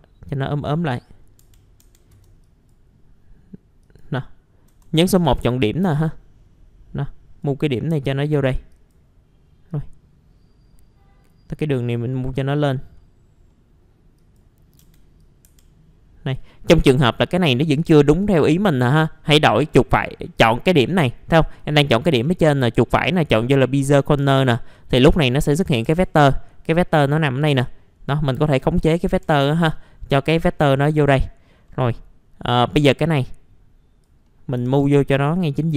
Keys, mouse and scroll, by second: 1.0 middle click, 1.4 F3, 1.7-2.1 scroll up 1, 2.4 click, 3.0-3.8 scroll up 1, 3.8 click, 5.1-7.8 drag, 7.8 middle click, 8.7-11.9 drag, 11.9-12.3 scroll down 1, 12.3 middle click, 13.9-14.2 scroll up 1, 14.2 click, 14.6 scroll up 1, 14.8 F3, 15.2 click, 15.4 F3, 16.5-17.3 scroll down 2, 16.8 middle click, 17.8-18.3 scroll up 1, 18.3 right click, 20.3 click, 21.0 middle click, 21.3 click, 22.2-23.2 right drag, 23.5 click, 24.2 F3, 24.7-25.5 scroll up 1, 25.5 middle click, 25.8 F3, 26.2-26.9 scroll up 1, 26.9-27.3 scroll down 1, 27.5 click, 28.8 scroll down 1, 29.1 F3, 29.3 middle click, 29.5 scroll down 1, 29.8-30.4 alt+scroll up 1, 30.4-30.9 alt+scroll down 1, 30.9 middle click, 31.1-31.7 scroll down 1, 31.7 middle click, 33.1-34.2 drag, 34.2 middle click, 34.6 typing, 35.3-35.6 scroll down 1, 35.6 middle click.